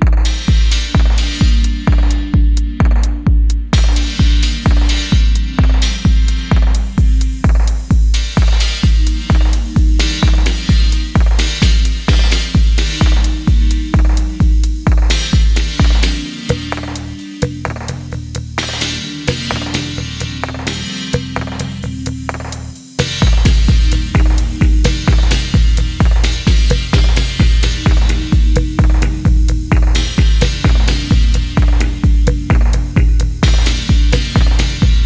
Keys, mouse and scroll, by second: 2.9 ctrl+z, 4.5 middle click, 5.5 shift+middle click, 7.3 F4, 7.3-8.1 scroll down 1, 8.2 shift+click, 9.9 alt+click, 12.0 typing, 14.2 F1, 14.4 middle click, 15.3 shift+middle click, 16.1 middle click, 17.2 middle click, 17.3 ctrl+click, 18.0 shift+middle click, 18.5 p, 21.1 middle click, 23.3 middle click, 23.6 right click, 25.5 a, 29.6 middle click, 31.3 F4, 31.6-32.6 scroll up 1, 32.6-34.6 scroll, 34.6 F1.